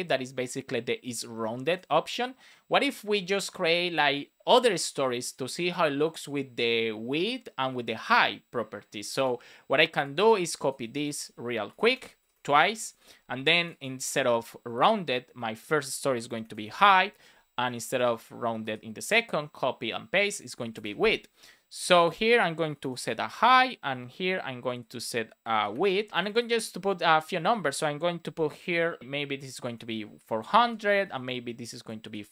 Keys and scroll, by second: 10.7 super+c, 11.6 Return, 11.8 super+v, 12.1 Return, 12.8 super+v, 14.0 super+d, 16.2 shift+h, 18.5 super+d, 20.3 shift+w, 23.4 Return, 30.5 alt+shift+Left, 30.9 super+c, 31.9 super+v.